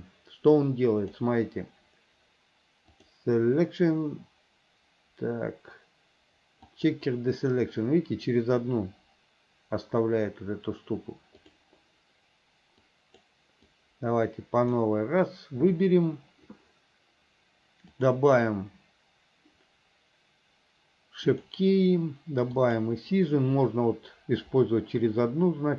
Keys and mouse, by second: 0.8 click, 3.0-7.1 drag, 11.5 click, 13.0 click, 13.8-15.0 drag, 18.2 click, 21.4 click, 22.7 click.